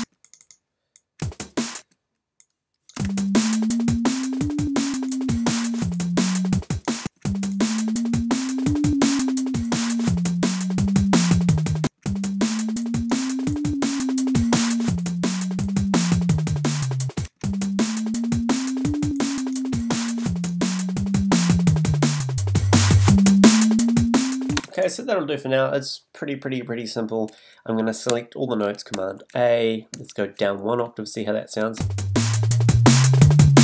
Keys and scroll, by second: 0.0 space, 1.2 space, 3.0 space, 24.5 space, 28.9 super+a.